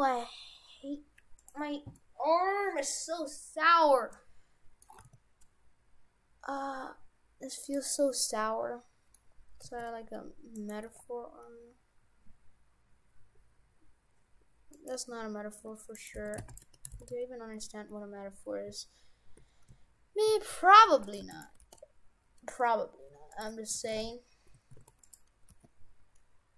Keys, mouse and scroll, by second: 2.0 middle click, 5.0 g, 8.0 middle click, 9.6 g, 10.8 g, 16.0 right click, 16.2 shift+f, 16.7 Tab, 17.0 shift+f, 21.3 shift+d, 21.6 g, 23.8 shift+f, 25.5 g.